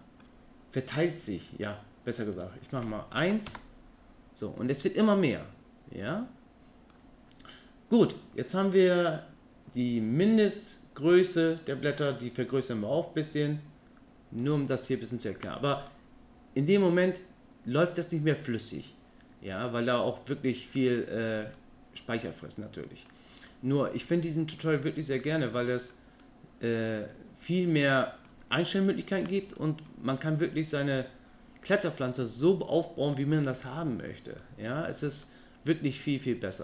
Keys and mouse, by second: 2.6-4.3 drag, 5.3-7.1 middle drag, 11.6-15.2 drag, 16.1-21.5 middle drag, 21.8-23.3 middle drag, 23.7-24.3 middle drag, 24.8-25.3 middle drag, 25.8 middle click, 26.4-28.5 middle drag, 29.8-30.1 middle drag, 33.7-34.2 middle drag, 34.6-35.0 middle drag, 35.5-36.6 middle drag.